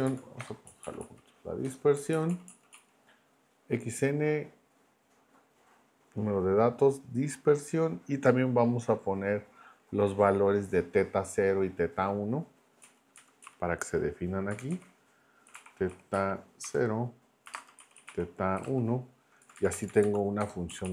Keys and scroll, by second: 0.4 BackSpace, 0.7 Right, 1.6 BackSpace, 2.0 Right, 2.6 Right, 12.8 Right, 13.2 Left, 13.4 Right, 14.5 Left, 14.7-19.1 typing, 19.4 Left, 20.4 BackSpace, 20.7 Right.